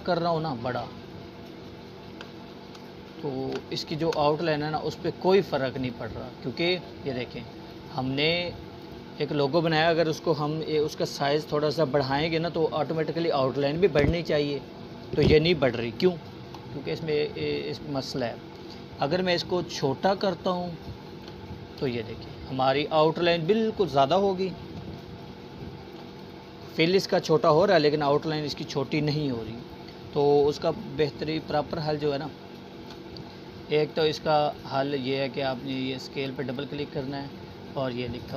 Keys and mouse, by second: 14.3-15.9 alt+shift+drag, 19.7-20.6 alt+shift+drag, 24.1 click, 25.9-27.5 alt+shift+drag, 35.4 click.